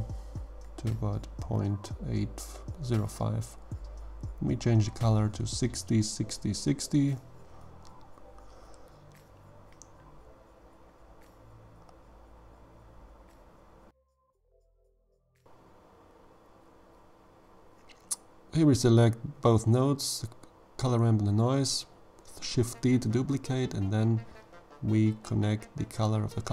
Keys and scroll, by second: 4.0 6, 4.2 0, 4.8 6, 5.0 0, 5.7 Return, 15.1 g, 16.9 g, 18.6 shift+d.